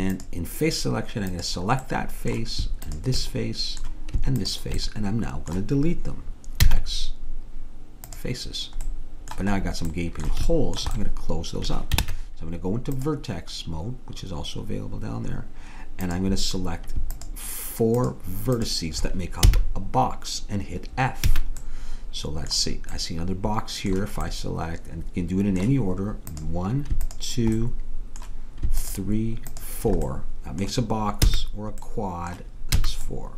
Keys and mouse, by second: 2.8-6.1 drag, 6.1 middle click, 6.7 x, 8.9 middle click, 9.9 middle click, 11.3 middle click, 12.1 ctrl+Tab, 16.1-20.4 drag, 19.5 f, 21.3 a, 24.9-26.3 middle drag, 26.3-31.3 drag, 27.6-28.8 middle drag, 31.3 f, 32.8 a.